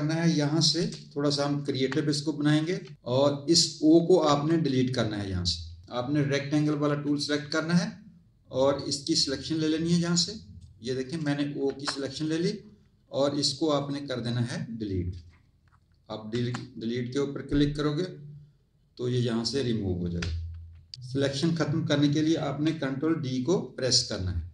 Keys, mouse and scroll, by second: 0.7 m, 1.6 z, 2.0 click, 4.2 Tab, 6.5 click, 8.6 click, 11.6 z, 12.1 click, 13.8 click, 16.2 Delete, 24.3 ctrl+d.